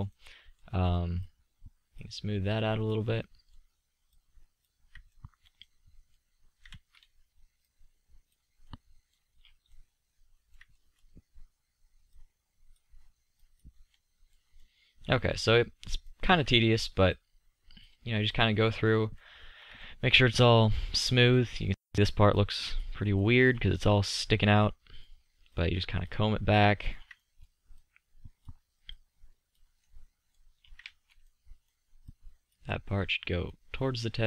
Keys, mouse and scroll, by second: 1.4-3.7 drag, 5.3 middle drag, 9.6-10.3 middle drag, 14.7 middle click, 19.1-20.6 middle drag, 22.4-22.9 middle drag, 30.0-30.7 middle drag, 31.7 middle click, 32.2-33.0 middle drag, 33.5-34.2 middle drag.